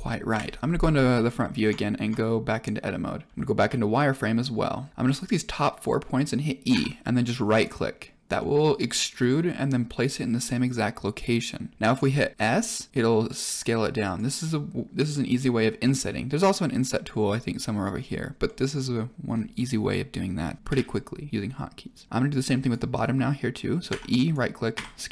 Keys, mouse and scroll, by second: 0.2 KP_1, 1.3 scroll up 2, 1.6 Tab, 3.3 z, 3.9-4.9 drag, 6.7 e, 8.3 middle click, 12.3 shift+middle click, 12.9 s, 18.4 middle click, 19.2 scroll down 2, 19.5 middle click, 20.2-20.6 scroll down 1, 20.6 KP_1, 22.2 click, 23.8 e, 24.7 s.